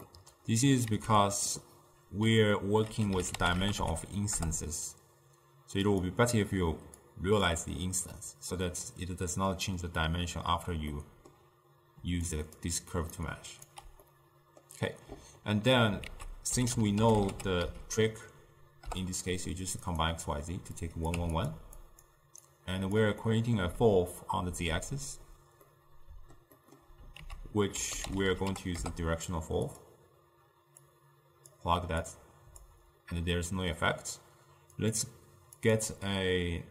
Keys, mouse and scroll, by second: 1.0 ctrl+a, 7.1-8.2 drag, 8.2-12.1 middle drag, 12.1 d, 12.4 click, 12.6-13.1 d, 13.2 right click, 13.8 d, 14.1-16.1 middle drag, 16.1 ctrl+a, 20.9 click, 21.9-23.3 drag, 23.3-27.3 middle drag, 27.3 ctrl+a, 30.9-35.0 drag, 35.7 click.